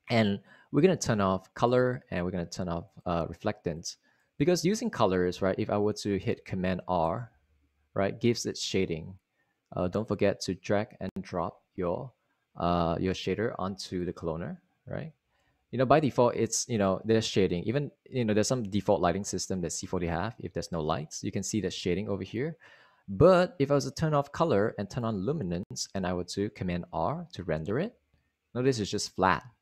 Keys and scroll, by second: 8.3 super+r, 16.2 super+r, 28.5 super+r.